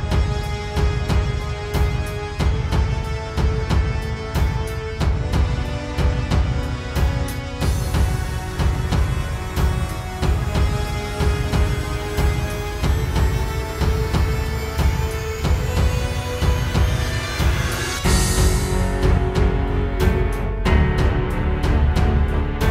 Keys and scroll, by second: 1.6 space, 2.1 super+space, 6.9 super+z, 15.7 super+z.